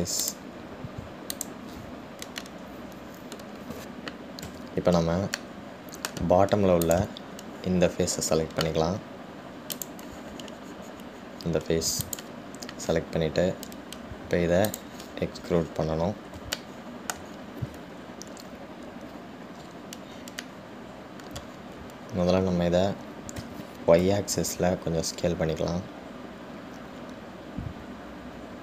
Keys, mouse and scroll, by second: 1.6 click, 2.6 click, 3.6-5.7 middle drag, 5.7 Tab, 6.6-8.0 middle drag, 8.0 click, 11.1 click, 13.2 click, 15.9 click, 16.7-17.5 scroll down 5, 16.9-24.6 middle drag, 17.5 scroll down 1, 20.9-21.7 scroll up 3, 24.6 s.